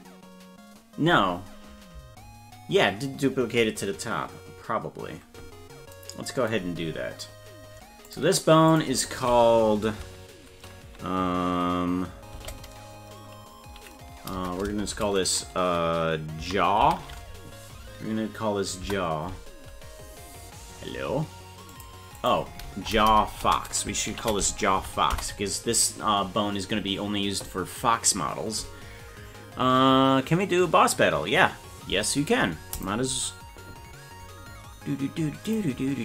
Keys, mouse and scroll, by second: 8.1 click, 8.7-19.4 drag, 21.7-25.9 drag, 22.7 BackSpace, 23.1 BackSpace.